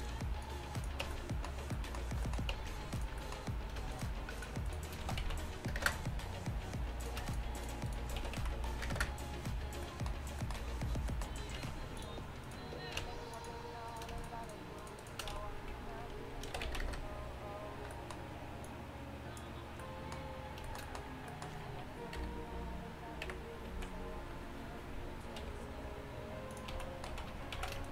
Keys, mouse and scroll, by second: 0.5 click, 1.1 Tab, 1.2 right click, 2.6 Tab, 5.1 s, 5.8-9.9 drag, 8.3 s, 11.2 middle click, 11.6 ctrl+Tab, 13.1 ctrl+Tab, 13.9-15.4 drag, 15.4 right click, 15.4 s, 16.3 right click, 18.8-20.7 drag, 21.0 middle click, 22.2 KP_3, 23.3 KP_1, 23.8 z, 25.6 r, 26.8 z, 27.2 z, 27.6 z.